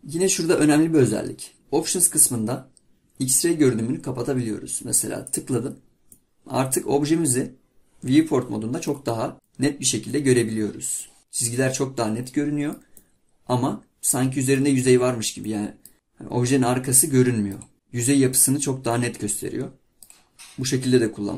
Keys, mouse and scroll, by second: 6.2-9.3 middle drag, 9.3 scroll down 1, 9.5-16.2 middle drag, 18.9-20.3 middle drag, 20.3-20.9 scroll up 3.